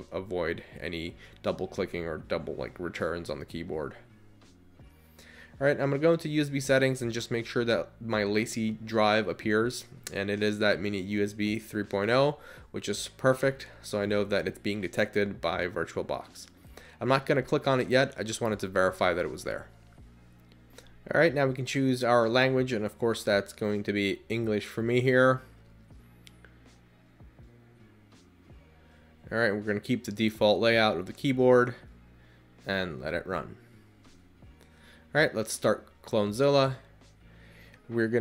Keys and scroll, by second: 0.2 Down, 0.9 Up, 2.0 Return, 29.6 Return, 32.6 Return, 37.7 Return.